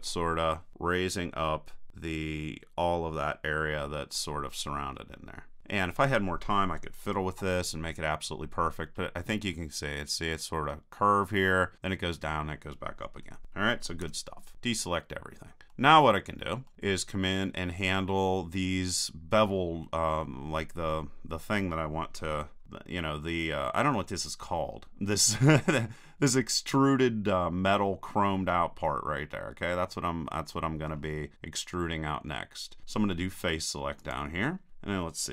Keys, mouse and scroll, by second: 7.1 KP_1, 10.6-14.0 middle drag, 14.0 a, 15.7-18.1 middle drag, 22.4 KP_3, 23.1-26.5 middle drag, 28.5-30.5 middle drag, 31.3-33.7 middle drag, 34.0-35.3 drag.